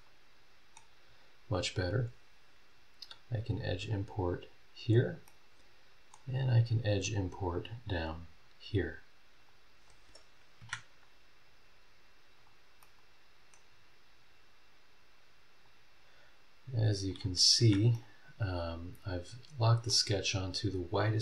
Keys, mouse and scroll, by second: 0.0 click, 0.0 right click, 1.0-1.5 scroll up 2, 3.0 click, 3.3-4.3 middle drag, 4.3 click, 4.9 scroll down 1, 5.2-6.3 middle drag, 6.4-7.6 scroll up 4, 8.3 scroll up 2, 9.4 click, 9.9 scroll down 2, 10.6 Escape, 12.3 click, 12.8 middle click, 13.0 click, 13.7 scroll down 2, 15.6 click, 17.1 click, 17.6 Escape, 17.9-20.1 middle drag, 20.2 scroll down 1, 20.6 scroll up 1.